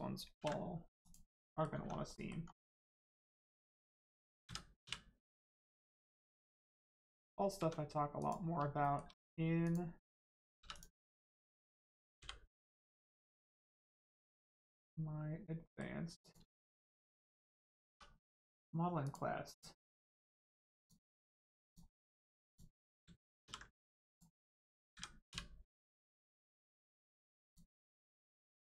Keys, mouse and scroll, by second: 0.3 ctrl+e, 1.0 click, 1.4 middle click, 1.7 Tab, 2.1 middle click, 2.4 scroll down 1, 2.6 Tab, 2.9 middle click, 4.4 a, 5.7 click, 8.1 click, 8.7 shift+middle click, 9.1 scroll up 1, 9.6 click, 10.5 3, 10.7 click, 12.1 l, 12.5 scroll down 1, 13.3 click, 14.1 scroll up 1, 14.4 middle click, 16.1 click, 16.5 shift+middle click, 16.7 shift+middle click, 18.5 click, 19.9 middle click, 20.7 shift+click, 21.6 click, 22.4 ctrl+click, 23.4 ctrl+e, 24.0 click, 24.9 a, 27.4 click, 28.3 Tab.